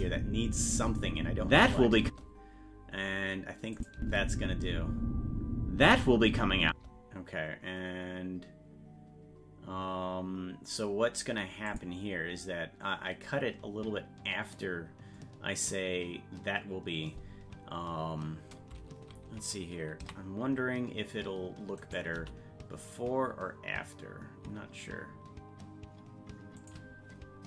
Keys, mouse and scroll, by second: 3.7 click, 4.0 space, 11.7 click, 21.8 right click, 22.2 g.